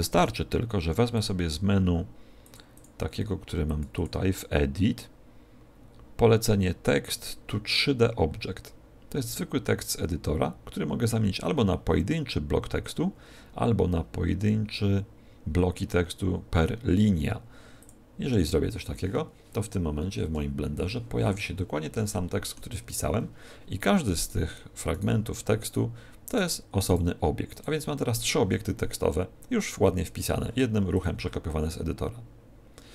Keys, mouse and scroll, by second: 1.1 click, 3.9 click, 21.4 scroll up 2, 22.0 shift+middle click, 22.0 scroll up 3, 30.9 click.